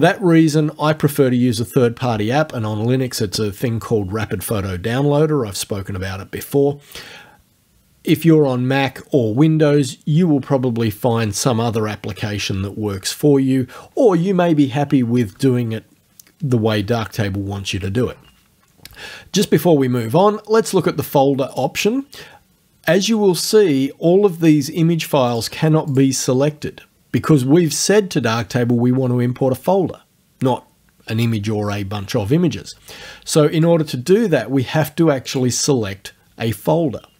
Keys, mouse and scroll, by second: 21.5 click, 25.3 click, 25.9 click, 33.6 click, 35.3 click.